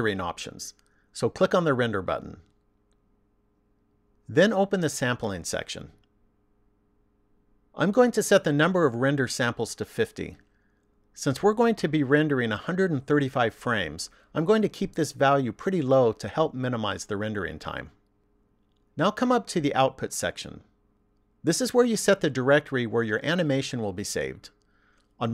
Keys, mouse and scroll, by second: 1.5 click, 4.2 click, 6.5 click, 10.7 click.